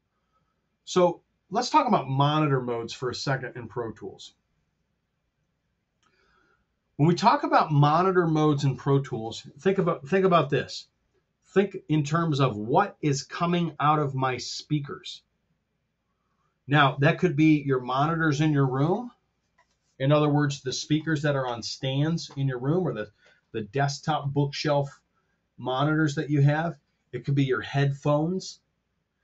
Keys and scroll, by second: 7.0 super+Tab, 8.7 super+z.